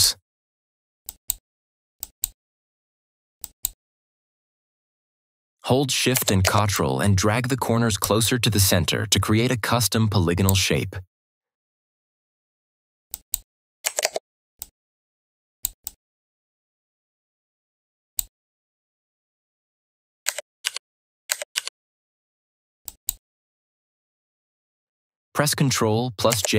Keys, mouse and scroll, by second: 6.0 click, 6.6-10.6 ctrl+shift+drag, 14.5-18.2 ctrl+shift+drag, 20.5 ctrl+-, 21.4 ctrl+-, 22.7 click.